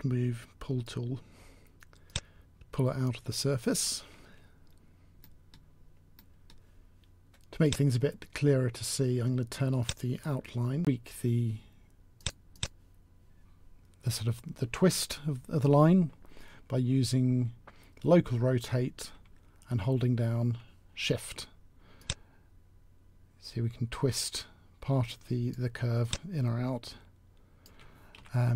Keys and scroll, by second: 10.7 t, 10.7 s, 28.0 t.